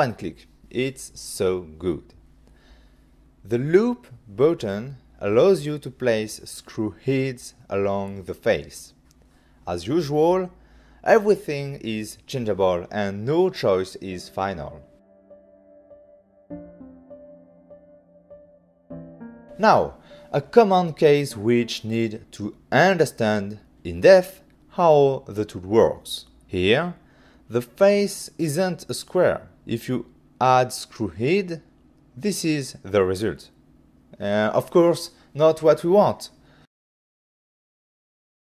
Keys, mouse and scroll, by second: 0.2 click, 2.7 click, 6.8 click, 15.2 click, 16.0 click, 19.5 click, 20.0 f, 21.8 click, 21.9 click, 22.6 click, 22.7 click, 24.2 Return, 25.4 click, 34.7 click, 37.9 click, 38.2 click.